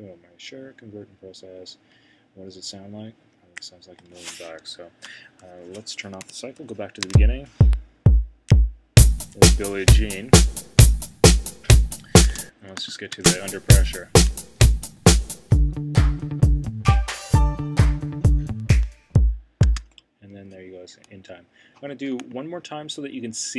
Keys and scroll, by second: 6.2 c, 6.5 Return.